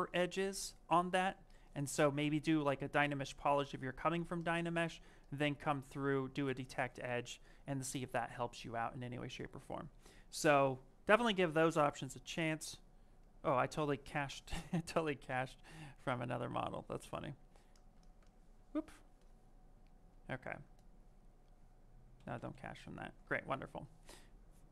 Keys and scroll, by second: 6.3 shift+f, 14.1 ctrl+z.